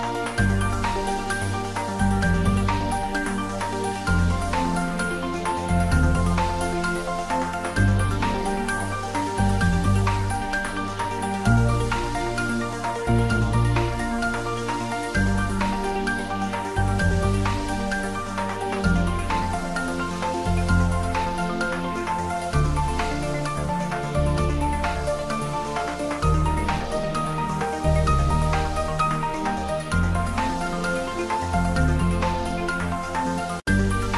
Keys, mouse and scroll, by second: 0.1 click, 0.4 Tab, 0.7-1.8 middle drag, 1.8 click, 2.4-2.8 typing, 2.9 click, 3.1-4.5 middle drag, 4.5 click, 5.1 shift+z, 5.9 middle click, 6.7 alt+e, 7.3 alt+e, 7.7 Tab, 8.1 a, 8.7 alt+e, 9.1 click, 12.9 click, 13.3 Tab, 13.9 click, 14.1 scroll up 1, 14.8 s, 14.9 x, 15.6 click, 16.0 g, 16.2 z, 17.6 click, 17.9 s, 19.8 click, 20.2 g, 20.8 click, 21.2 s, 21.3 x, 22.2 click, 22.3-22.8 scroll up 1, 22.8 middle click, 23.9 click, 24.3-24.6 scroll down 1, 25.7 g, 27.5 click, 27.9 s, 28.3 y, 29.4 click, 29.8-32.3 typing, 30.2 click, 31.1 click, 32.0 click, 33.4 click.